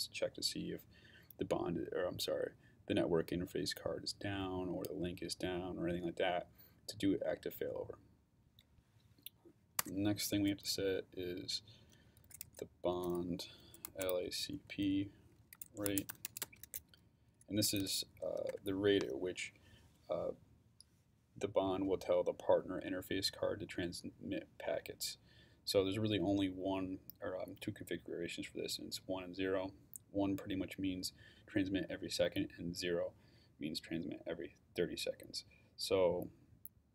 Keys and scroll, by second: 9.8 Return, 11.7-18.5 typing.